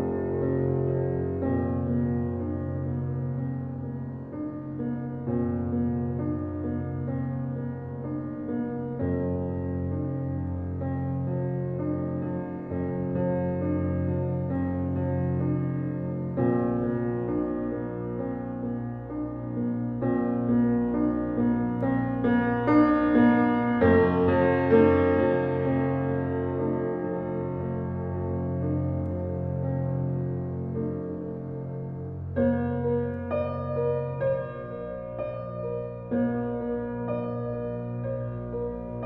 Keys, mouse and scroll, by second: 20.3 click, 21.5 space, 22.5-30.9 drag, 30.9 space, 31.1 click, 31.5 space, 32.6-39.0 drag.